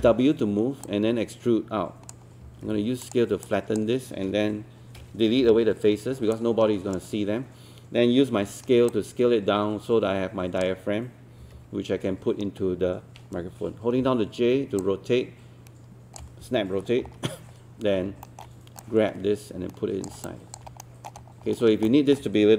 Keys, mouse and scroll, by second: 0.0 w, 0.9 click, 2.4 r, 3.0-4.5 drag, 5.4 Delete, 6.4-7.5 right drag, 8.9-11.4 drag, 11.4 e, 14.5-17.0 typing, 15.0 click, 15.3 click, 17.0-18.0 scroll down 1, 18.2 alt+middle click, 18.8 click, 20.3 alt+click, 20.8 alt+middle click, 21.2-21.9 scroll up 2, 21.9 alt+middle click.